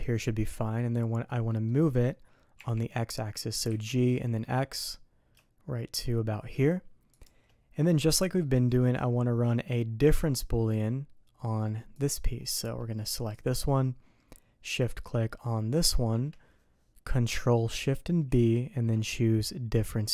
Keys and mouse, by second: 0.3 middle click, 1.4 click, 2.5 g, 7.9 click, 8.7-10.3 drag, 10.3-10.7 middle drag, 13.4-14.7 drag, 15.7 shift+click.